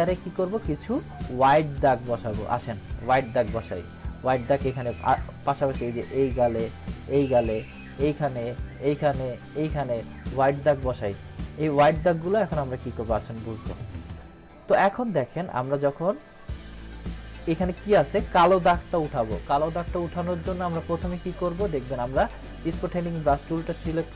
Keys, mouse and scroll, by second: 6.2 click, 20.4 click.